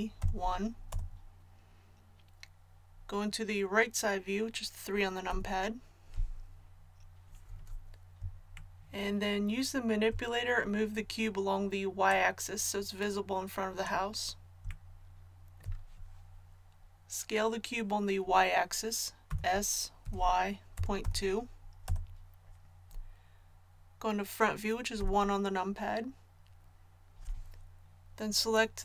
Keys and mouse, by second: 5.3 KP_3, 12.1-14.9 drag, 19.3 s, 25.0 KP_1.